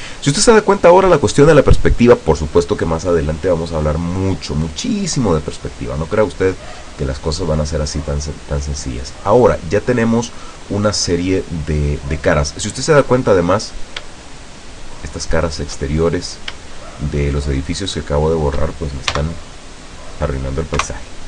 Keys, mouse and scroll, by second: 1.3 scroll down 1, 4.3 middle click, 5.0-5.3 scroll down 1, 6.4 scroll down 1, 6.9 middle click, 7.3 middle click, 8.1 scroll up 2, 8.7 scroll down 2, 9.3 middle click, 10.1 middle click, 10.4 middle click, 11.9-13.8 middle drag, 13.9 shift+right click, 14.3 shift+right click, 14.7 shift+right click, 15.1 shift+right click, 15.5 shift+right click, 16.0 shift+middle click, 16.9 shift+right click, 17.3 shift+right click, 17.9 shift+right click, 18.3 shift+right click, 19.2 x, 20.0 click, 20.9 KP_0.